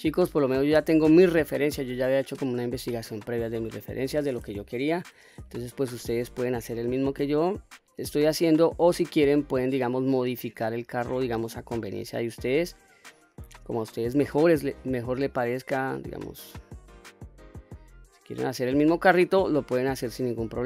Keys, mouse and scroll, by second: 0.2 middle click, 0.8 Tab, 1.4 middle click, 2.9 middle click, 4.7 KP_3, 5.9 q, 8.8 click, 10.6-14.2 drag, 15.1 click, 16.5-17.5 drag, 18.4 click, 19.5 click.